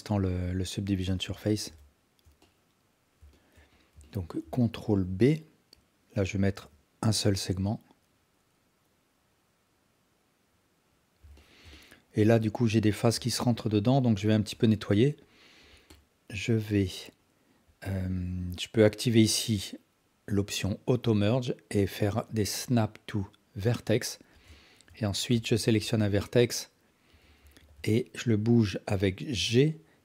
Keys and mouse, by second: 2.4-3.0 alt+drag, 3.3 alt+shift+drag, 3.7 alt+drag, 4.0 ctrl+alt+drag, 4.9 ctrl+b, 11.3 ctrl+alt+click, 11.9 alt+shift+click, 12.9 alt+click, 13.4 ctrl+alt+click, 13.8 alt+click, 16.0-17.6 alt+drag, 21.8-24.0 drag, 24.6 alt+shift+drag, 25.3 1, 26.0-27.1 alt+drag, 27.4 alt+z, 27.8-28.2 alt+drag, 29.4 g.